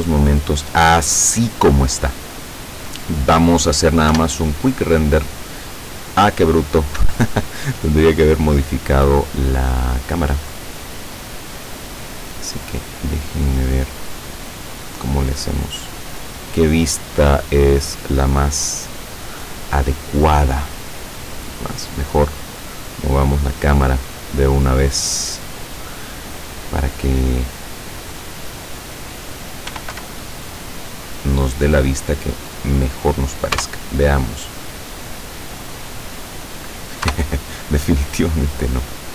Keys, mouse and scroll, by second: 0.4-1.1 scroll up 2, 1.8 scroll down 1, 4.2 F12, 7.0 Escape, 7.6-8.0 scroll down 2, 8.6 scroll down 2, 8.7-9.2 scroll up 2, 9.5 middle click, 10.8-12.8 middle drag, 13.0 middle click, 13.8-14.8 middle drag, 15.2-16.3 middle drag, 16.7-18.5 middle drag, 18.7 middle click, 19.7 scroll down 1, 20.9 right click, 22.7 click, 24.5-25.6 drag, 25.9-27.0 middle drag, 29.7 r, 30.0 y, 32.9 click, 33.6 KP_0, 37.2 KP_0.